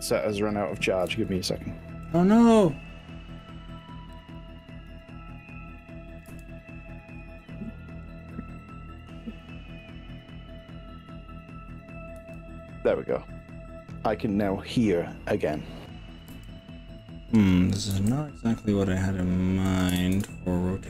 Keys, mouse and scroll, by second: 0.2 ctrl+KP_Add, 0.8 click, 1.2 ctrl+z, 2.1 click, 4.2 click, 6.3 r, 6.7 scroll up 2, 7.2-8.4 scroll down 8, 12.2 z, 16.3 y, 18.4 x, 19.8 click, 20.0 ctrl+z.